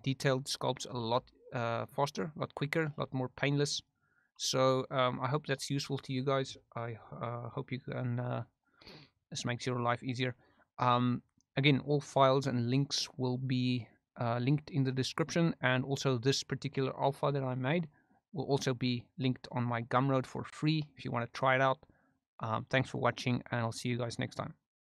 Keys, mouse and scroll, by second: 0.5 middle click, 1.1 shift+f, 2.0 middle click, 2.4 click, 3.1 middle click, 3.4 click, 4.0 middle click, 4.8 middle click, 8.5 middle click, 9.3 click, 10.2 middle click, 18.8 middle click, 20.2 click, 21.2 middle click.